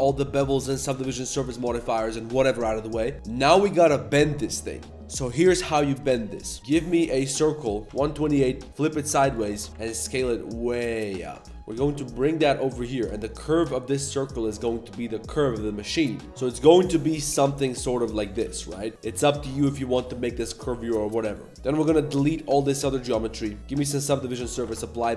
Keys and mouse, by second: 0.4 middle click, 1.6 ctrl+1, 1.7 ctrl+2, 6.6 ctrl+s, 6.6 shift+a, 7.8 click, 8.7 r, 9.7 s, 11.5 g, 11.5 g, 11.6 g, 16.3 g, 16.3 z, 17.6 s, 18.2 g, 19.2 Tab, 19.4-22.1 typing, 19.6 click, 22.9 Tab, 23.2 shift+drag, 23.6 ctrl+1, 23.6 ctrl+2, 24.5 click, 24.6 ctrl+a.